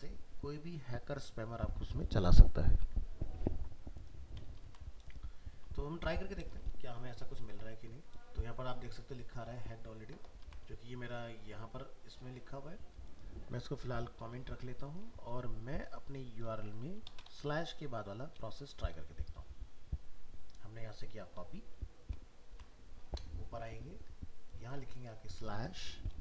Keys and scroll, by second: 4.6 ctrl+s, 5.6 alt+Tab, 10.4 alt+Tab, 22.5 ctrl+c, 23.0 alt+Tab.